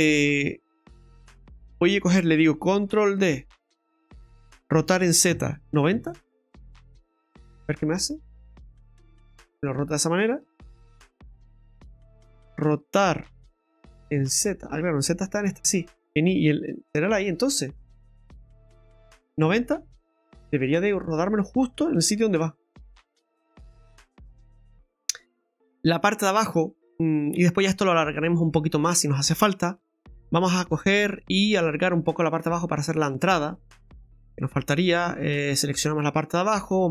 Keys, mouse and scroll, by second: 1.3 KP_7, 3.4 shift+d, 4.8 r, 7.9 middle click, 10.4 ctrl+z, 11.1 middle click, 13.3 r, 20.6 click, 21.0 scroll down 2, 21.3 middle click, 21.7 right click, 22.4 Tab, 22.7 scroll up 3, 25.4 scroll up 2, 25.8 middle click, 26.4 shift+middle click, 28.8 middle click, 30.0 right click, 30.4 Tab, 31.6 right click, 32.4 right click, 33.8 click, 34.4 right click, 34.8 alt+shift+right click, 34.9 alt+shift+right click, 35.7-36.3 scroll down 3, 36.0 middle click.